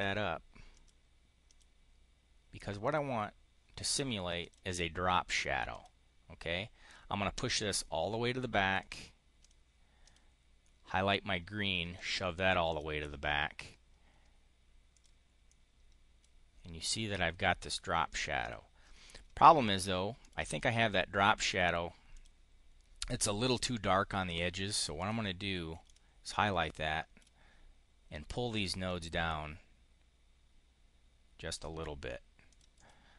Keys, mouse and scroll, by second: 0.6 click, 1.3 click, 2.7 click, 4.2 click, 5.6 click, 8.7 click, 9.2 click, 9.9 click, 11.8 click, 12.5 click, 14.8 click, 15.3 click, 18.0 click, 18.3 click, 20.1 click, 22.0 click, 24.8 click, 25.7-27.2 ctrl+drag, 28.5-31.5 ctrl+drag, 32.4 click, 32.6 click.